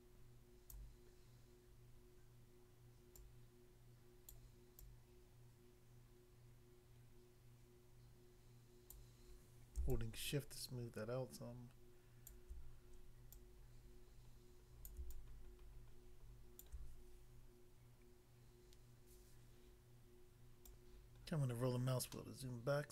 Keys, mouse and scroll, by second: 0.8 click, 3.1 click, 4.3 click, 4.8 click, 9.0 click, 9.9 shift+click, 14.9 click, 15.1 shift+click, 20.6 click, 20.8 click, 21.2-21.6 scroll down 1, 22.1 middle click.